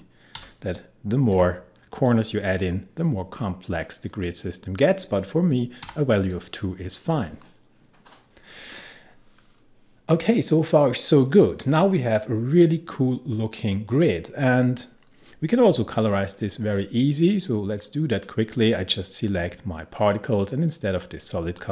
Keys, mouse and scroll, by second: 0.4-1.8 typing, 2.1 click, 4.8 click, 5.8 2, 6.3 click, 8.7-9.4 scroll down 1, 9.4-11.2 scroll up 1, 18.1 click, 21.6-21.7 drag.